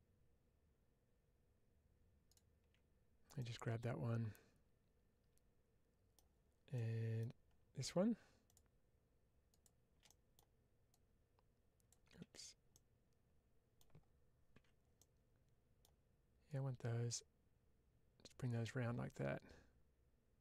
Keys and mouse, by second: 3.3-6.0 middle drag, 6.6 middle click, 10.0 middle click, 10.8 click, 12.6-13.6 middle drag, 14.8 middle click, 16.4-18.2 drag, 18.5-20.4 middle drag.